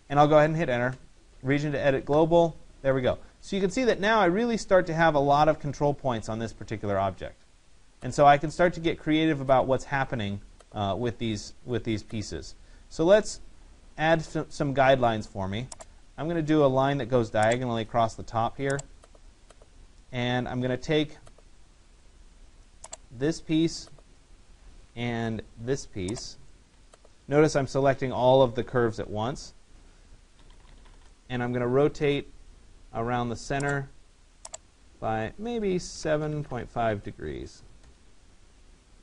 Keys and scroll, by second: 0.6 Return, 30.6 Return, 35.6 7.